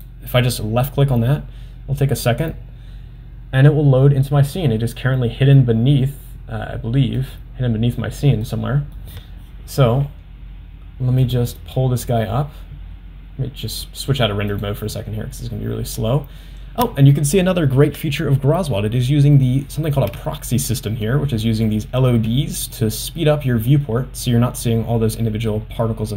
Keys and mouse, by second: 5.1-8.4 middle drag, 19.5 middle click, 20.3 shift+middle click, 21.1 middle click, 21.9 middle click, 22.8-23.9 middle drag, 25.5-26.1 middle drag.